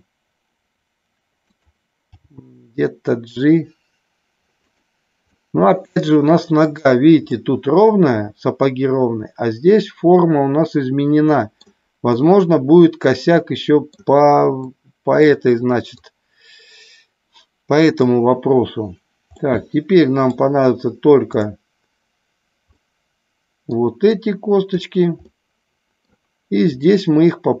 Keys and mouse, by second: 1.4 click, 2.1 g, 5.3-6.5 middle drag, 7.3-11.5 middle drag, 12.1-13.9 middle drag, 14.7 middle click, 16.0-18.0 drag, 19.4-20.4 middle drag, 22.8 middle click, 24.2 click, 25.3 middle click, 26.8 middle click.